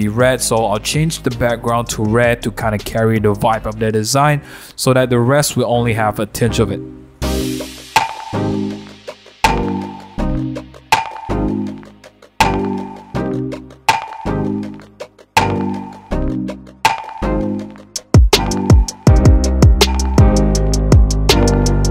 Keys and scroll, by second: 0.2 super+a, 2.1 super+d, 2.5 super+t, 7.5 Return, 7.6 super+0, 7.6 super+a, 7.8 super+v, 7.8 BackSpace, 7.9 super+z, 8.1 super+0, 8.1 super+-, 9.0-21.6 typing, 21.7 super+0, 21.8 super+-.